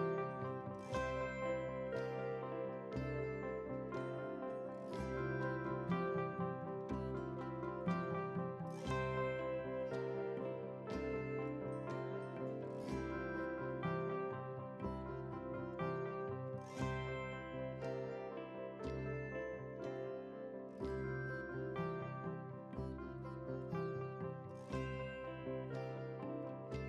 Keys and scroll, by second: 1.0 ctrl+w, 3.8 ctrl+a, 4.7 ctrl+c, 6.9 ctrl+v, 9.9 ctrl+t, 12.3 ctrl+t.